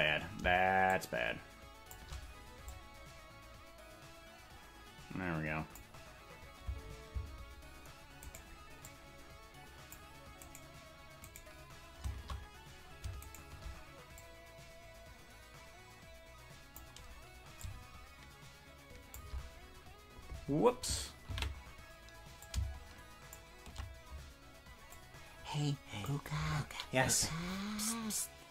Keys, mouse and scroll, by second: 0.9-2.0 shift+drag, 2.7-5.8 drag, 7.1 space, 8.4 right click, 8.8-10.0 drag, 10.5-12.2 right drag, 13.3 shift+right click, 14.2-16.8 drag, 17.6-19.4 drag, 21.8 ctrl+z, 22.4 shift+click, 24.9-26.1 drag.